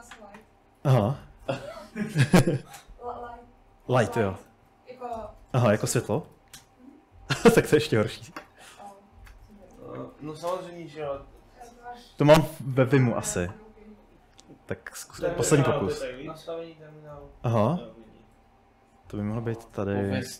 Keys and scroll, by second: 0.0-6.9 typing, 4.9 Up, 8.2-11.4 typing.